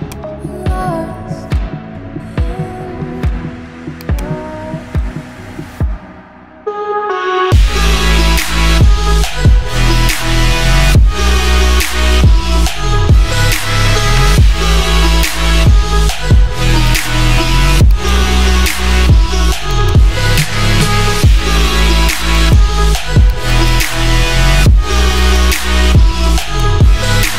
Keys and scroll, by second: 3.1 ].